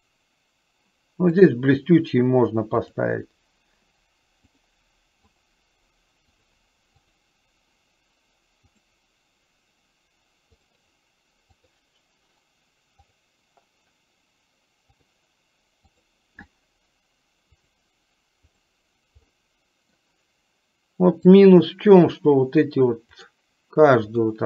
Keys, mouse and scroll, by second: 2.8 click, 4.6-8.1 drag, 9.0-11.6 drag, 13.5-16.6 drag, 17.8-19.0 drag, 19.6 middle click, 21.5 click, 23.2-24.4 drag.